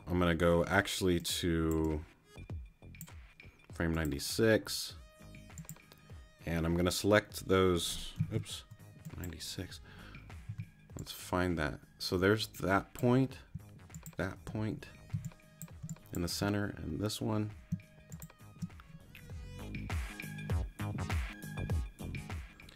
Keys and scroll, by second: 8.3 super+z, 10.5 t, 15.1 shift+space.